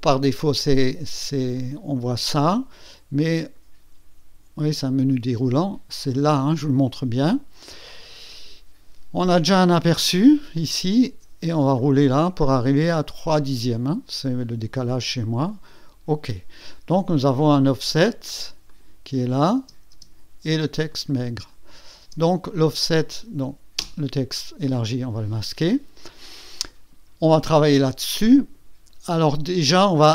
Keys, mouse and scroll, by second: 1.5 click, 3.4 click, 3.9 click, 5.0 click, 6.3 click, 11.3-12.3 scroll down 4, 12.3 scroll up 2, 12.4-12.7 scroll down 2, 12.7-13.2 scroll up 2, 13.2 scroll down 2, 15.5 click, 17.5 click, 18.7 click, 19.6 space, 20.9 click, 21.3 space, 22.0 space, 22.5 click, 22.9 click, 23.8 space, 28.0 click.